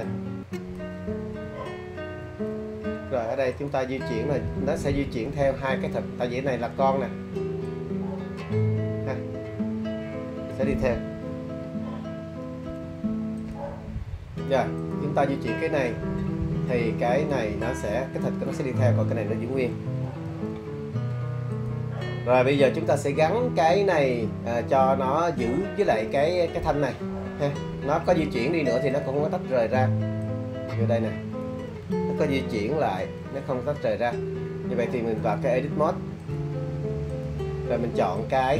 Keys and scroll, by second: 2.2 super+z, 12.4 super+z, 20.3 super+z, 33.0 super+z.